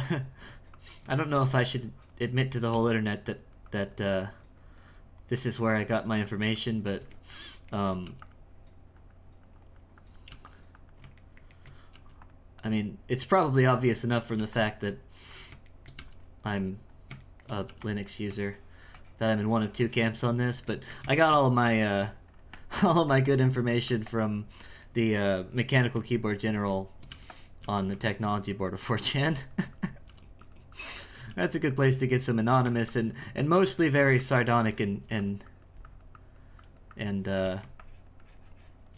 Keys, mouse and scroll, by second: 0.0-2.7 drag, 3.3-7.2 drag, 7.2 ctrl+middle click, 8.8-10.3 drag, 10.7 click, 11.3 shift+middle click, 12.6-14.4 drag, 14.8 click, 15.7 shift+middle click, 16.6 click, 17.3 shift+middle click, 18.0-20.5 drag, 20.5 shift+middle click, 21.0 ctrl+z, 21.4 shift+middle click, 22.3-24.7 shift+drag, 24.7-27.1 shift+middle drag, 27.1 f, 27.6 f, 28.3-30.1 drag, 30.1 f, 30.7 click, 31.3 f, 31.7-33.8 drag, 33.8 f, 34.2 click, 35.0 f, 35.4-38.9 drag.